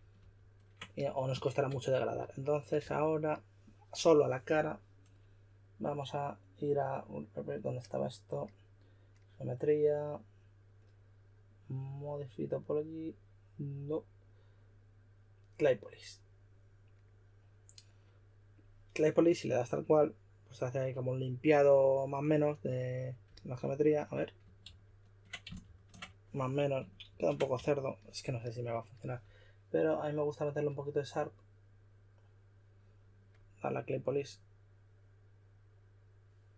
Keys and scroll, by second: 2.8 s, 24.6 super+z, 25.6 shift+super+z, 27.0 super+z, 27.5 s.